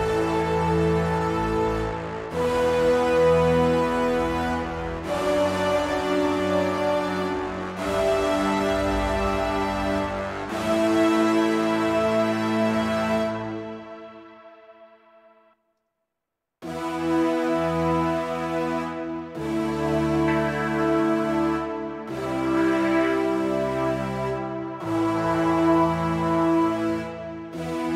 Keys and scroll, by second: 15.7 space, 15.9 space.